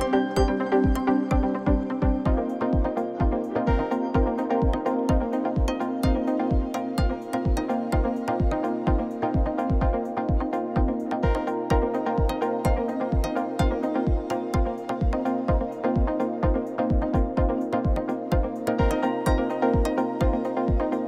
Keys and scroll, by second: 0.2 alt+a, 0.4 l, 0.7 g, 1.8 alt+a, 2.0 l, 2.3 g, 3.6 alt+a, 3.8 l, 4.0 g, 5.5 alt+a, 6.6 Tab, 7.6 alt+a, 8.4 Tab, 8.9 3, 9.9 g, 10.5 Tab, 12.5 g, 13.0 Tab, 13.3 alt+a, 15.1 Tab, 16.3-20.3 typing, 17.4 Tab, 18.2 Tab.